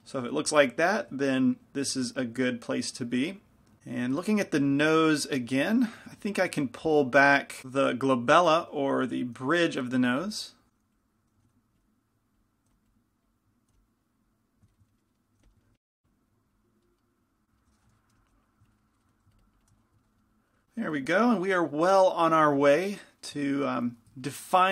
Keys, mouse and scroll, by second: 5.4 f, 6.2 f, 6.2 g, 6.8 f, 9.6 f, 11.0-15.0 drag, 11.0 g, 11.5 f, 11.5 g, 12.7 f, 13.8 f, 14.8 middle click, 15.5 f, 15.8 f, 16.0-17.3 drag, 18.2 |, 18.2 f, 18.4-20.4 drag, 20.0 middle click, 20.4-24.7 middle drag.